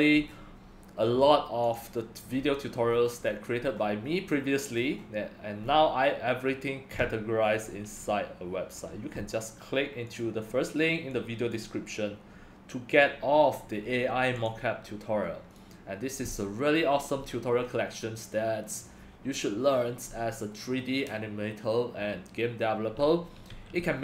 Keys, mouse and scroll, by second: 0.2-1.0 scroll, 1.8-2.3 drag, 2.3-3.6 scroll down 4, 3.6-4.0 scroll down 1, 4.0 middle click, 4.0 scroll, 4.0-4.8 scroll down 2, 4.8-5.6 scroll down 2, 5.6 middle click, 5.6 scroll, 5.6-7.4 scroll down 2, 7.4-10.2 middle drag, 7.4-9.3 scroll, 10.2-24.0 drag.